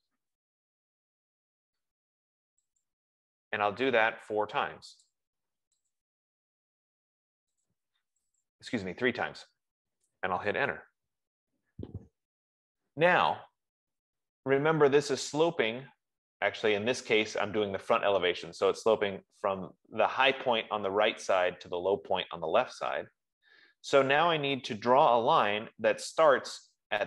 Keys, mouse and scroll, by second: 0.0-1.0 typing, 1.8 middle click, 2.0 middle click, 3.1 click, 5.4 click, 6.1 scroll, 6.3 click, 8.0 click, 8.9 click, 9.9-10.3 scroll, 11.1 Return, 11.1 middle click, 14.3-15.0 scroll, 15.0-16.3 scroll, 16.8-17.3 scroll, 17.5-18.3 scroll, 23.4 scroll, 24.4 scroll, 25.0 scroll.